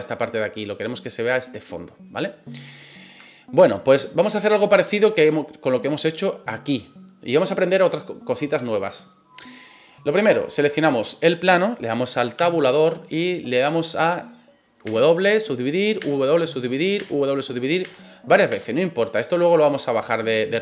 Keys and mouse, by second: 2.0 middle click, 3.2 shift+middle click, 3.7-4.7 middle drag, 12.3 Tab, 14.8 w, 16.0 w, 16.9 w, 17.8 w, 18.5 w, 20.0 middle click.